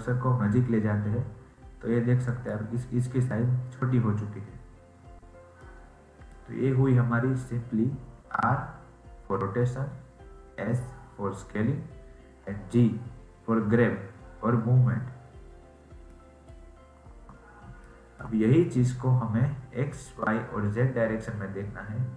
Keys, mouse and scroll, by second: 3.0-4.9 scroll up 11, 4.9-5.5 scroll down 6, 5.5-8.7 middle drag, 15.3-15.7 scroll up 2, 15.7 scroll down 4, 16.0 middle click, 16.6-17.7 scroll up 2, 17.7-20.9 shift+middle drag.